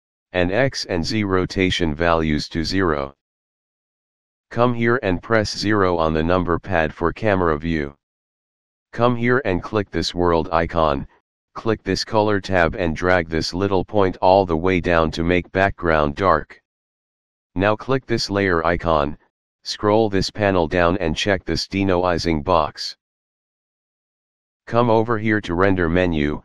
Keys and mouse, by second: 0.0 click, 0.5 KP_0, 0.8 Return, 2.0 click, 2.7 KP_0, 3.0 Return, 5.2 KP_0, 8.8 click, 11.3 click, 13.1 click, 16.4 click, 18.3 click, 22.7 click, 25.6 click.